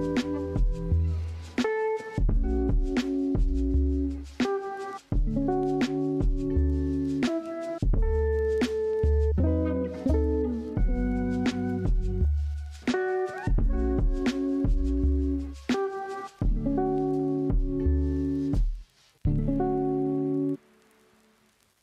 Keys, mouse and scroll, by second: 0.3 z, 0.6 g, 2.0 ctrl+r, 2.8 s, 4.6-7.3 typing, 4.8 Tab, 7.6-9.3 middle drag, 9.3-9.6 scroll up 2, 9.6-10.3 middle drag, 10.3-11.3 typing, 12.0 click, 12.2 scroll down 2, 12.4-13.3 middle drag, 13.3 scroll down 1, 13.4-14.5 middle drag, 14.5-15.1 scroll up 1, 15.1 click, 15.4 Tab, 15.5-16.7 middle drag, 16.7 click, 17.8 s, 19.6 s, 19.7 s, 19.9-21.8 middle drag.